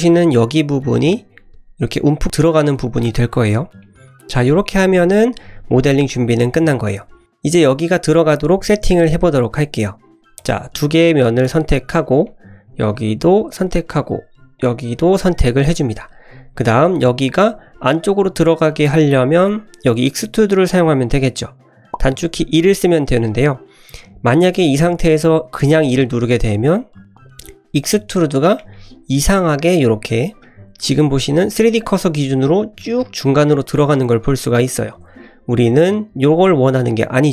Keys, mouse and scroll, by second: 3.8-6.9 middle drag, 7.2 click, 10.4 click, 11.4 shift+click, 12.3 middle click, 12.9 shift+click, 13.3 shift+click, 13.8 middle click, 14.6 shift+click, 15.0 shift+click, 15.7 middle click, 16.3 s, 16.7 scroll up 1, 23.4 middle click, 23.9-25.6 scroll down 1, 25.6 e, 28.7-29.4 middle drag, 30.5 middle drag, 31.3 middle drag, 31.9 middle click, 32.9-35.2 middle drag, 36.2 ctrl+z, 36.8-37.2 middle drag.